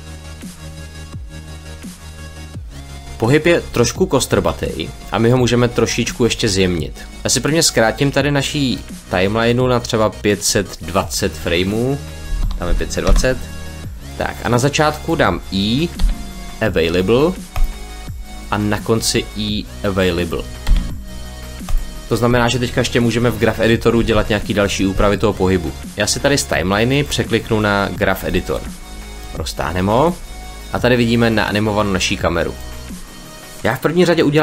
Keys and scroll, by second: 12.1 5, 12.5 0, 12.9 Return, 15.9 i, 20.5 i.